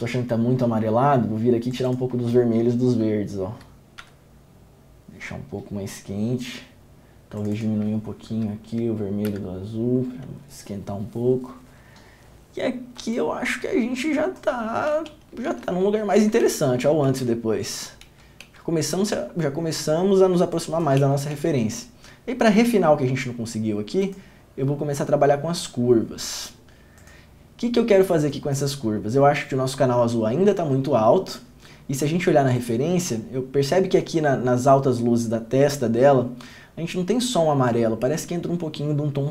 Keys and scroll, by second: 4.1 Down, 9.4 Down, 14.9 Down, 15.1 ctrl+d, 15.7 ctrl+d, 16.6 ctrl+d, 17.3 ctrl+d, 18.3 ctrl+d, 18.6 ctrl+d, 21.2 ctrl+d, 21.5 ctrl+d.